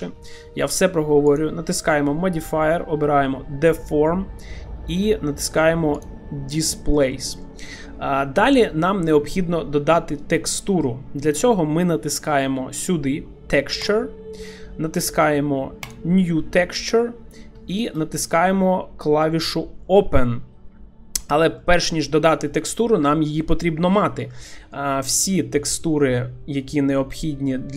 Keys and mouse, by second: 1.3-6.2 drag, 6.7 shift+middle drag, 7.1 middle click, 13.9 click, 15.9 click, 17.7 shift+middle click, 21.7 middle click.